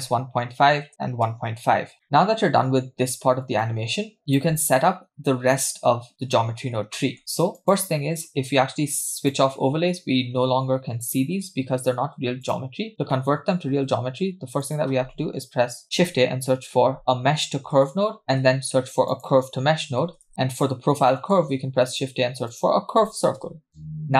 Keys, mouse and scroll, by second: 2.0 middle click, 2.0-3.2 scroll down 3, 2.0 space, 3.2 space, 3.2-3.6 scroll down 2, 3.6 middle click, 4.2 click, 7.0 middle click, 7.5 click, 9.2 click, 12.4 click, 12.9-13.7 scroll up 5, 13.1 middle click, 13.7 shift+a, 18.3 shift+a, 21.1 middle click, 21.4 shift+a, 23.7 scroll up 3.